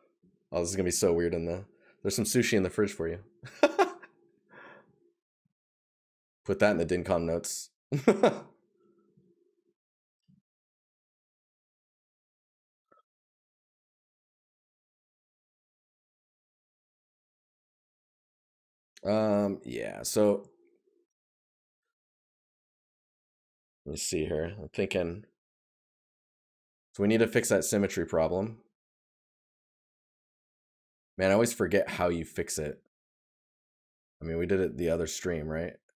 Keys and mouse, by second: 5.3 right click, 10.2 right click, 14.3 right click, 19.4 right click, 26.6 right click.